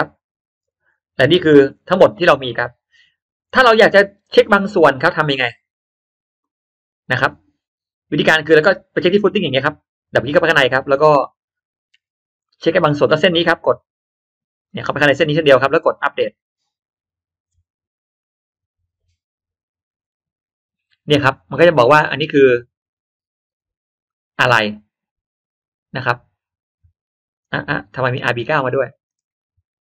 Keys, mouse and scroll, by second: 0.5-1.1 scroll up 1, 1.6-2.2 scroll down 2, 2.2-2.6 scroll up 1, 2.3 middle click, 3.4-3.7 scroll down 1, 5.1 click, 8.0 click, 8.8-9.6 middle drag, 10.0 click, 10.9 middle click, 12.0 n, 12.4 middle click, 12.8 middle drag, 13.6 click, 14.6 click, 14.8 click, 15.1 click, 16.4 click, 23.9-24.2 scroll up 1, 24.0-29.0 middle drag.